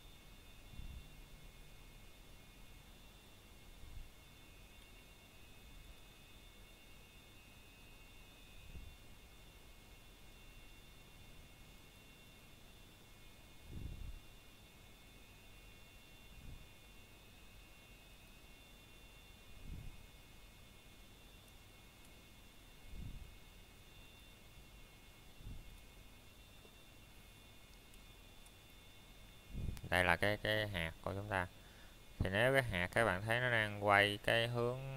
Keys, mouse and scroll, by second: 0.7 middle click, 1.6-2.1 scroll down 1, 2.1 middle click, 2.5 scroll up 1, 3.4 middle click, 4.4 scroll up 1, 6.3 click, 8.7 click, 11.0 middle click, 11.3 scroll down 1, 11.9 middle click, 13.1 scroll up 1, 15.2 click, 21.6 middle click, 22.1 scroll up 1, 22.9 middle click, 24.4 scroll down 1, 25.5 z, 26.4 click, 26.8 middle click, 27.6 scroll down 1, 28.7 middle click, 29.5 scroll up 1, 31.9 scroll down 1, 32.4 middle click, 32.6 scroll down 1, 33.2 middle click, 34.2 z.